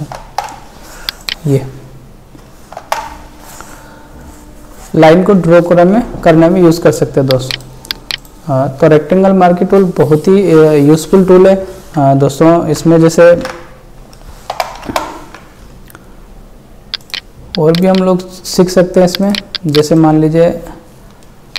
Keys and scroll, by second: 0.2 alt+BackSpace, 2.8 alt+BackSpace, 13.3 ctrl+shift+e, 14.5 ctrl+BackSpace, 21.3 space.